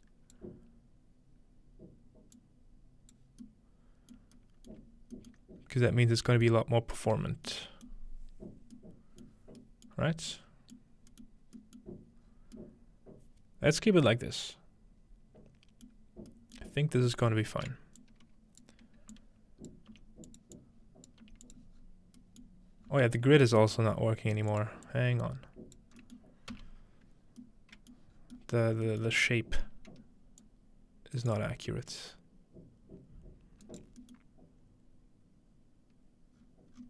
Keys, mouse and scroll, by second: 2.4-3.4 drag, 4.9-7.6 scroll up 1, 9.3-10.1 scroll down 1, 9.5 middle click, 10.1 scroll up 1, 10.8 middle click, 11.1-12.2 scroll up 1, 11.4 middle click, 12.2 middle click, 12.2-13.9 scroll down 1, 16.9-18.7 middle drag, 18.0-19.9 drag, 19.9 typing, 21.2 typing, 21.8-23.4 scroll down 1, 22.2 middle click, 22.4 click, 22.7 middle click, 23.6-25.8 middle drag, 24.0 scroll up 1, 24.5-27.4 drag, 24.7-25.8 scroll up 1, 26.5-27.4 middle drag, 27.3 scroll up 1, 27.4 middle click, 28.1 scroll up 2, 28.2 scroll down 2, 28.4 middle click, 28.9 middle click, 29.2-30.4 scroll up 4, 30.4-34.2 drag, 31.2 right click, 33.7 right click, 36.4-36.7 scroll down 2, 36.7 scroll up 2.